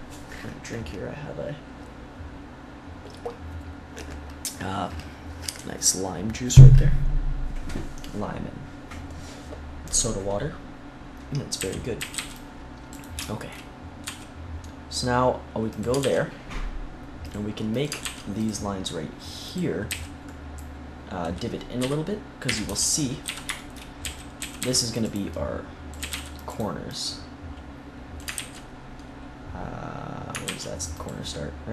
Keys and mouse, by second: 7.7-11.0 middle drag, 11.5 a, 11.9 a, 12.1 c, 12.9-14.9 drag, 14.0 e, 15.7 click, 15.9 ctrl+r, 17.7 click, 17.9 ctrl+r, 18.3-19.4 drag, 19.8 a, 21.7-24.5 typing, 25.9 a, 26.0 c, 27.5 click, 28.3 ctrl+z, 30.4 ctrl+r.